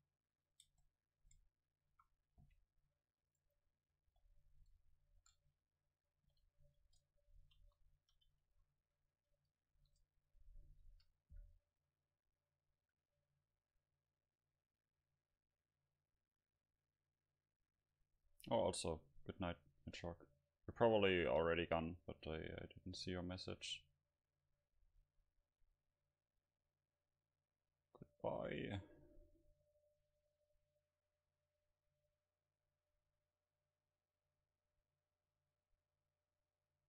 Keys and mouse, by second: 0.7 click, 0.7 Tab, 1.2 Tab, 1.3 Tab, 2.0 a, 2.5 c, 3.4 click, 4.1 h, 4.2 click, 5.1 ctrl+z, 5.5 g, 6.1 click, 6.3 r, 6.9 Tab, 7.6 KP_0, 8.5 a, 8.9 a, 9.8 ctrl+s, 13.4 F12, 26.6-30.7 middle drag, 32.4-36.1 middle drag.